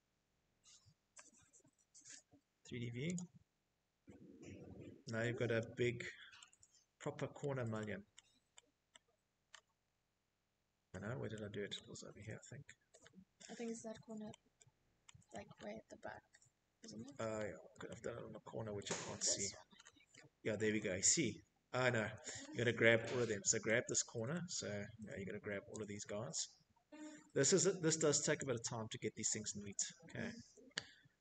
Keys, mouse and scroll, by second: 0.8 click, 1.8 middle click, 1.8-2.1 middle click, 2.0 middle click, 2.6 middle click, 4.1 shift+middle click, 5.1 middle click, 5.8 middle click, 6.6 middle click, 7.1-7.8 scroll, 8.4-9.2 scroll, 9.5 middle click, 9.8 middle click, 10.0 middle click, 10.6 middle click, 10.8 middle click, 11.3 middle click, 11.6 scroll, 12.1 scroll, 13.0-13.5 scroll, 14.3-15.1 scroll, 15.4 middle click, 16.5 shift+middle click, 16.8 middle click, 16.8-18.0 scroll, 18.4-18.9 scroll, 19.4-20.3 scroll, 20.5 shift+middle click, 21.4 middle click, 22.0 middle click, 22.3 middle click, 22.3 middle click, 22.4 middle click, 26.1 click, 27.2 middle click, 27.2 middle click, 27.5 scroll, 27.8 click, 28.6 middle click.